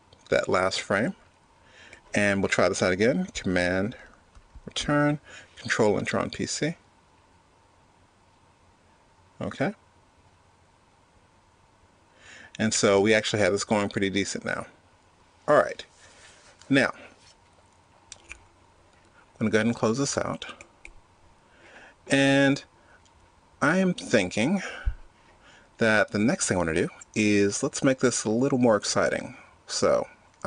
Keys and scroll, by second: 4.0 super+Return.